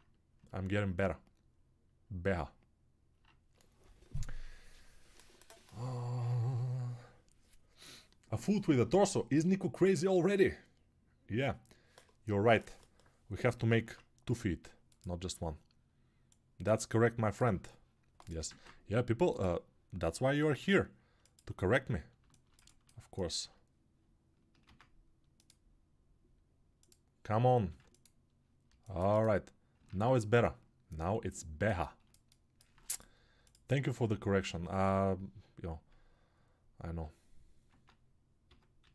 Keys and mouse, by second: 18.4 ctrl+right click.